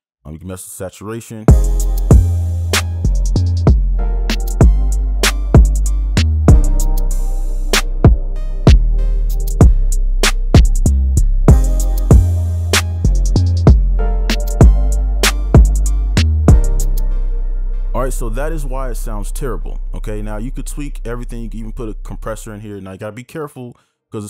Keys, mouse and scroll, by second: 1.4-3.8 space, 14.5 right click, 15.5 right click, 16.9 space.